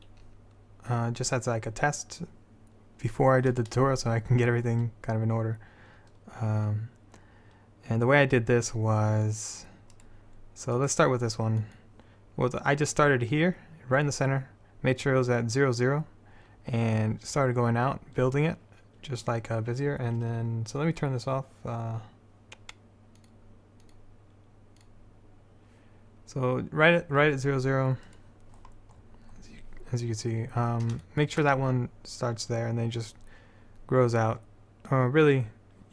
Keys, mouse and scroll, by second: 1.0-2.9 drag, 10.1-20.0 drag, 23.3-27.4 drag, 27.4 middle click, 28.2-30.6 drag, 33.4-35.9 middle drag.